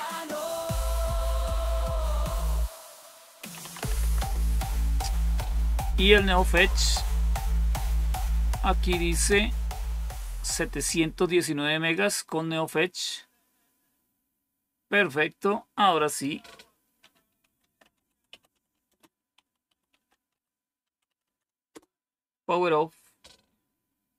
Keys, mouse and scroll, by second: 2.1 click, 3.2-4.2 typing, 10.8-11.9 drag, 16.8-21.6 typing.